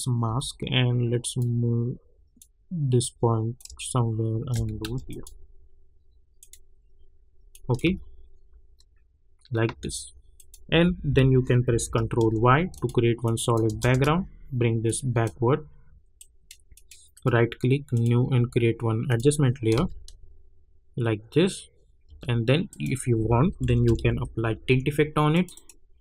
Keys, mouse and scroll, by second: 0.2 v, 1.2-4.8 drag, 4.8 ctrl+s, 5.0 click, 7.8 space, 9.7 space, 10.3 click, 10.7 u, 11.6 ctrl+y, 12.7 click, 13.6 Return, 14.8-16.1 drag, 17.1 right click, 17.9 click, 19.7 space, 22.0 space, 22.7 click, 23.2-24.4 typing, 25.3 click.